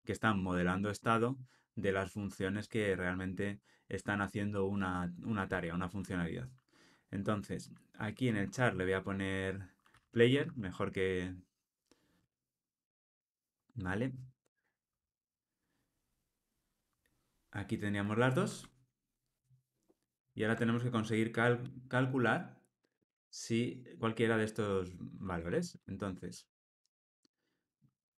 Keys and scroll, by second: 12.9 Return, 19.4 alt+shift+Down, 20.1 alt+shift+Up, 21.6 alt+shift+Up.